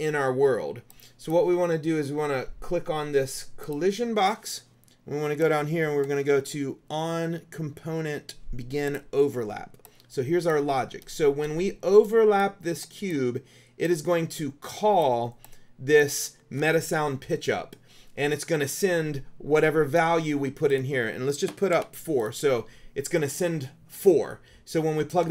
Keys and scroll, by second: 21.9 KP_4.